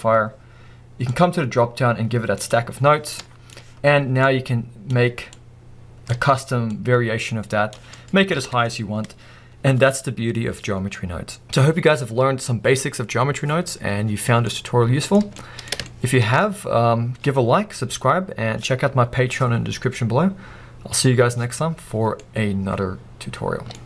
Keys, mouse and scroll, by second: 3.2-4.4 middle drag, 3.5-4.4 scroll up 2, 4.4-8.0 drag, 8.0-23.8 middle drag, 8.4 alt+a.